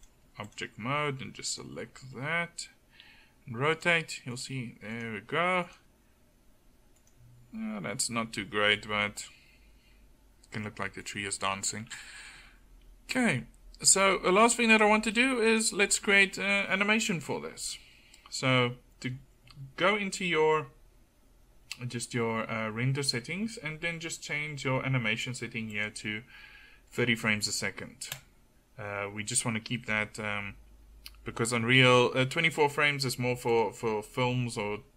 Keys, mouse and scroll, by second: 3.0 r, 4.5 r, 5.8 r, 7.7 r, 27.6-33.6 middle drag.